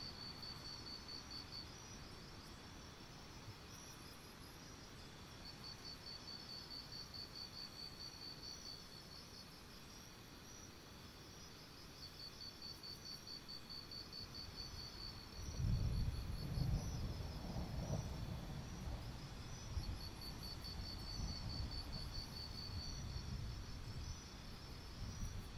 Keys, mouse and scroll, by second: 0.6 click, 1.1-1.6 scroll down 2, 1.6 click, 1.7-3.1 scroll up 1, 5.0 click, 5.3-6.5 scroll up 3, 6.5 click, 7.1-8.0 scroll up 1, 8.1 alt+scroll up 1, 8.2 scroll down 1, 9.9 click, 10.6-12.9 alt+scroll up 1, 12.9 click, 13.0-13.8 alt+scroll down 2, 14.1-15.1 alt+scroll up 1, 15.1 click, 15.2-15.9 scroll up 1, 15.9 click, 16.1-16.6 scroll up 1, 16.6 click, 16.7-18.6 scroll up 1, 18.6 click, 20.1 scroll down 1, 20.9 click, 22.7-23.2 alt+scroll down 1, 23.2-23.6 scroll up 1, 23.7 shift+click, 24.0 shift+click, 24.2 scroll up 1, 24.8 shift+click, 25.1 scroll up 1.